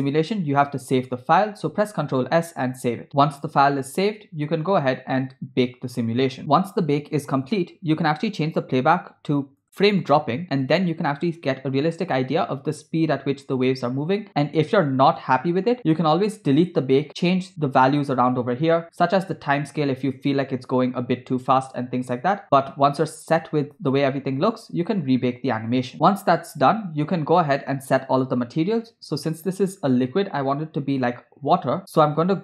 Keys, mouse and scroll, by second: 3.1 ctrl+s, 6.3 click, 10.7 space, 15.7 space, 17.1 scroll up 2, 19.0-19.3 scroll up 1, 20.3 space, 24.5 space, 25.1 scroll down 1, 29.2 space.